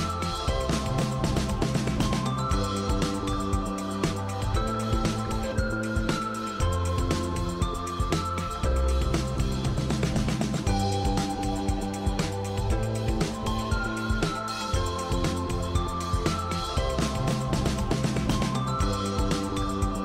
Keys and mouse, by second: 1.4 click, 2.5-3.2 right drag, 5.7-7.7 middle drag, 10.3-20.0 right drag.